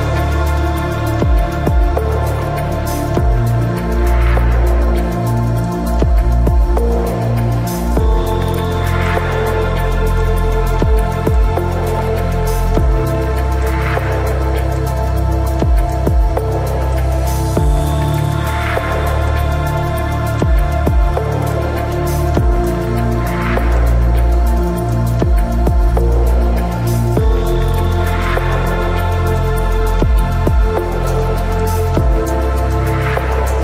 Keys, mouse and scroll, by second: 0.1 middle click, 0.5-2.2 right drag, 0.7 ctrl+s, 1.6 KP_Decimal, 4.5 e, 5.8 z, 6.4-8.0 drag, 8.0 ctrl+z, 9.3 KP_3, 9.6 KP_Decimal, 9.9 z, 10.4 middle click, 13.2 middle click, 13.3 z, 14.0-15.7 drag, 16.1 KP_3, 17.1 Tab, 17.5 Tab, 18.6 ctrl+b, 20.4 Tab, 21.1 ctrl+s, 22.3 z, 23.8 Tab, 24.2 middle click, 24.6 Tab, 26.3 middle click, 27.9-30.3 middle drag, 31.5 Tab.